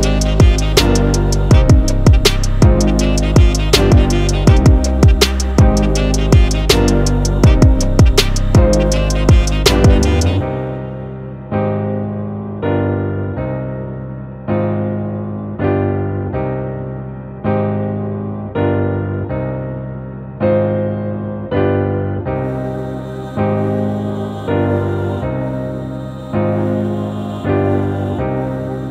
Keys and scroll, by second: 0.1 super+-, 0.4 super+0, 0.7 super+j, 1.0 BackSpace, 1.1 super+t, 5.7 Return, 6.2-14.6 typing, 14.8 Return, 17.9 super+t, 19.6 Return, 19.6 super+1, 20.2 super+d, 20.8 super+0, 20.8 super+-, 20.9 super+-, 21.0 super+t, 21.7 Return, 21.9 super+1, 22.2 super+d, 22.2 shift+Right, 23.6 super+=, 23.8-26.2 typing, 27.0 super+=, 27.7-28.9 typing, 28.8 super+z.